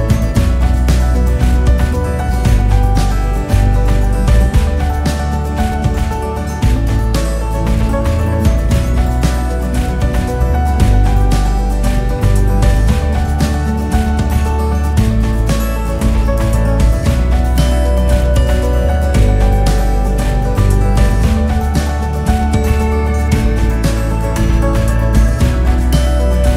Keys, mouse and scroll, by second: 0.1 alt+click, 1.0 alt+click, 2.5 alt+click, 3.7 ctrl+z, 4.0 ctrl+z, 4.4 ctrl+z, 4.7 ctrl+z, 5.0 ctrl+z, 5.5 ctrl+z, 7.7 click, 9.5 s, 11.6 click, 13.1 e, 14.6 s, 15.6-16.1 scroll down 3, 16.1-17.1 scroll up 1, 17.1 e, 18.1 s, 20.0 e, 21.4 s, 22.3-23.0 scroll down 1, 23.0 e, 24.6 s, 26.0 e.